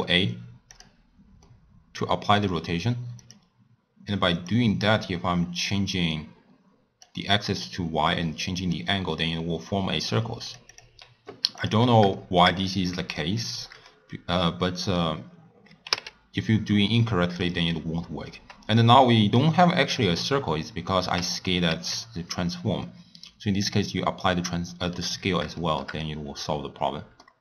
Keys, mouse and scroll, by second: 1.5-3.2 middle drag, 3.2-11.7 drag, 12.1-21.7 shift+middle drag, 21.7 ctrl+a, 24.2 scroll down 1, 24.3-25.1 middle drag, 25.1-25.6 scroll up 3, 25.6-27.4 shift+middle drag.